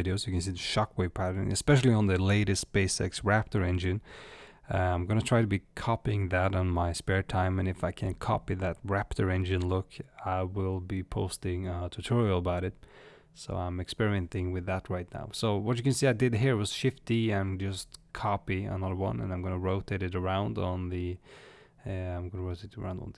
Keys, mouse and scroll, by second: 0.1 click, 3.5 click, 7.0 click.